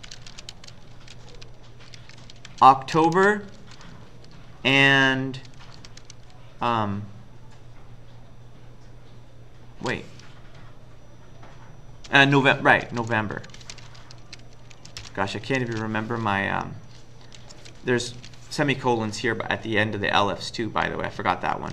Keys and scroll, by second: 0.0-5.9 typing, 12.6-18.7 typing, 21.6 Up.